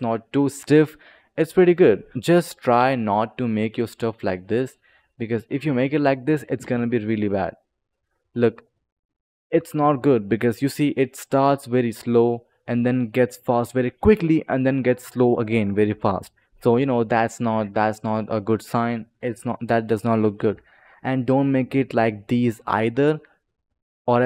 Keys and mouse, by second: 2.0 click, 2.1 ctrl+z, 2.1 click, 3.0 click, 4.7 click, 6.5 space, 9.3 click, 10.7 click, 11.4-12.9 drag, 17.7 click, 20.2 click, 22.4 click.